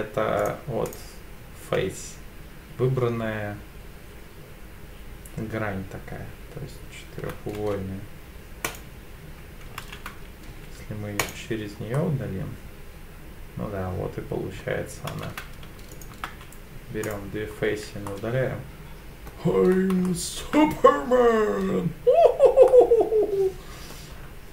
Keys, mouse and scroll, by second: 0.9 click, 7.6 x, 9.8 ctrl+z, 10.5 x, 11.9-14.6 middle drag, 15.1 ctrl+z, 15.9 shift+click, 16.3 x, 17.5-18.1 scroll down 2, 18.1-19.3 middle drag, 19.7 scroll up 2, 20.0 shift+middle click, 22.7-23.9 middle drag, 24.1-24.5 scroll down 2.